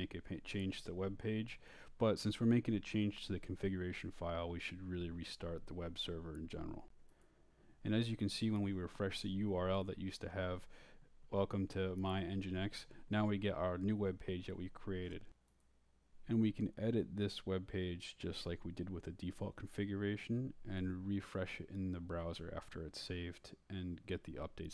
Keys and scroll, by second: 1.7 Return, 7.8-11.4 typing, 11.5 shift+Tab, 12.5 Tab, 12.6 Return, 14.4-17.2 typing, 17.3 Return, 18.3 Down, 19.8 Right, 21.9 Right, 22.6 shift+Right, 22.7-24.7 typing, 23.0 shift+Return.